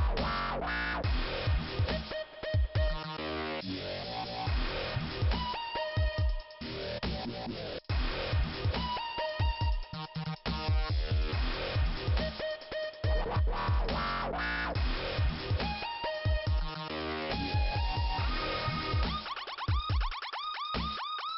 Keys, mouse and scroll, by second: 1.4 click, 1.5 click, 5.0 click, 6.7 scroll up 2, 8.2 click, 9.3 click, 9.4 click, 10.0 click, 11.6 click, 11.7 click, 12.3 right click, 12.4 right click, 13.4 click, 13.5 click, 13.9 scroll down 2, 15.4 click, 17.7 middle click, 18.8 scroll up 2.